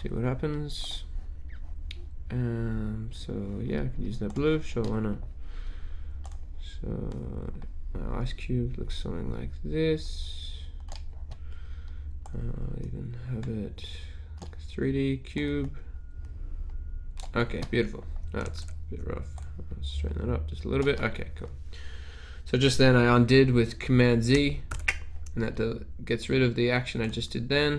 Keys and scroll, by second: 18.6 super+z, 24.8 super+z.